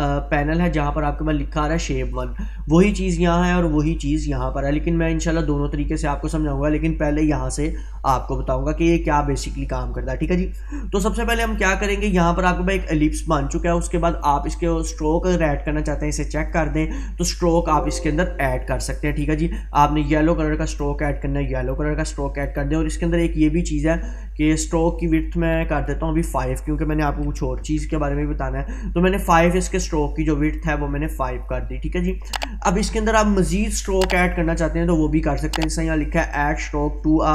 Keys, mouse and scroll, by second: 9.4-10.4 drag, 14.3-19.1 drag, 30.6-32.4 drag.